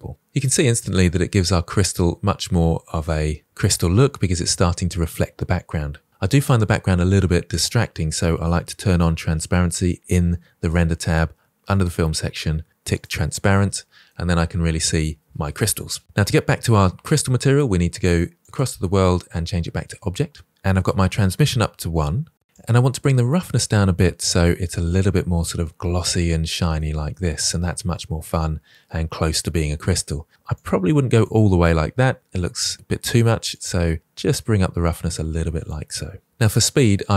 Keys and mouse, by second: 0.5-1.3 middle drag, 12.8 click, 14.0-14.7 middle drag, 18.3-20.5 drag, 20.8-21.4 middle drag, 22.7-25.3 drag, 26.7-27.1 middle drag, 27.6-27.9 middle drag, 30.4 click, 33.4-35.6 drag.